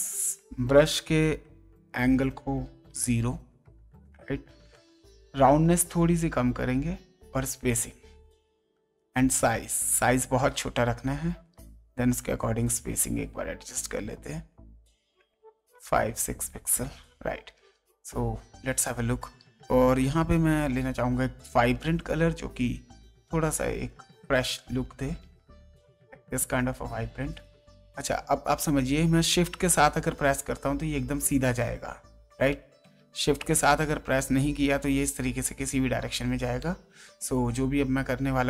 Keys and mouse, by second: 0.1 click, 1.8 click, 2.8 KP_0, 5.7 click, 8.1 click, 9.8 click, 12.4 click, 14.8 click, 18.4 click, 19.7 click, 21.9 click, 23.3 click, 25.8 click, 27.7 space, 28.1 click, 29.7 shift+click, 32.5 ctrl+space, 33.1 ctrl+z, 33.9 click, 36.6 ctrl+space, 36.7 ctrl+click, 37.6 ctrl+space, 37.8 ctrl+click, 38.3 click.